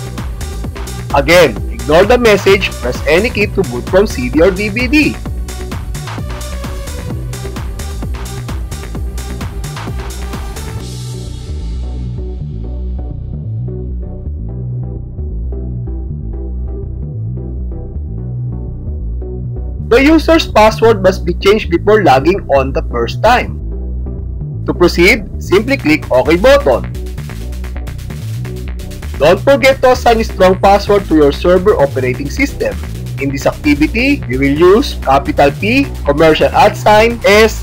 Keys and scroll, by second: 27.9 space.